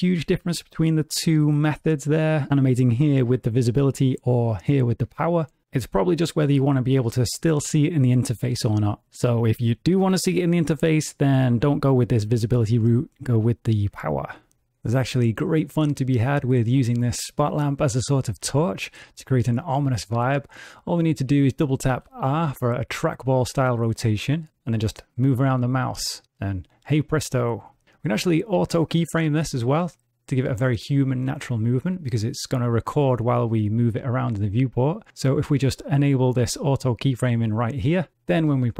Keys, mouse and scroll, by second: 21.9 r, 35.1 click, 36.0 click, 38.3 space.